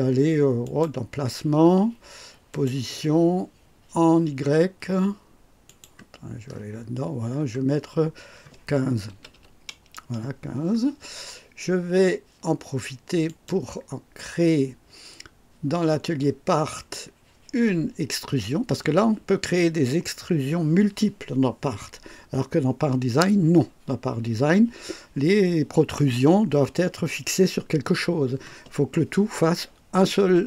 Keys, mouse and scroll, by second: 0.6 click, 2.4 click, 5.6 click, 6.5 scroll up 1, 6.8 middle click, 7.3-7.6 scroll up 1, 9.0 KP_1, 9.3 KP_5, 13.2 click, 16.7 click.